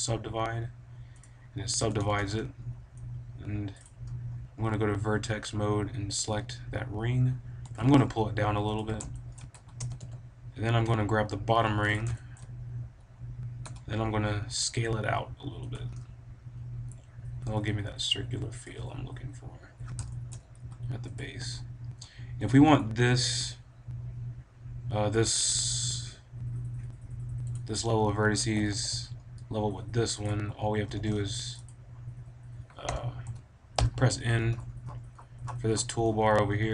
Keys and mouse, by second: 1.1-3.0 drag, 1.7 a, 1.9 b, 3.7-5.5 drag, 5.5 middle click, 7.5 g, 8.7 click, 9.5 a, 9.7 b, 13.5 s, 13.6 click, 15.7-17.7 drag, 17.4 s, 17.9 middle click, 18.6-20.5 drag, 20.5 s, 21.3 a, 22.2 click, 22.4 b, 27.4-29.4 right drag, 28.5 a, 28.6 b, 30.3-31.9 drag, 30.5 a, 31.2 b, 32.8 t, 33.1 t, 33.7 n, 34.5-34.8 middle drag, 35.3 middle click, 35.5-36.7 middle drag.